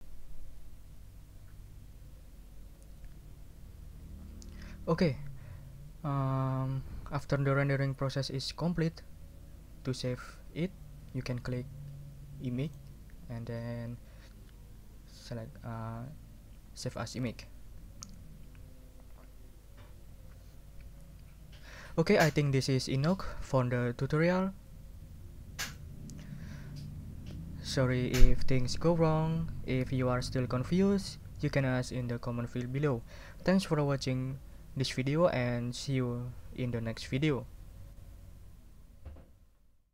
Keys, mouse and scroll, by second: 12.6 click, 25.6 click.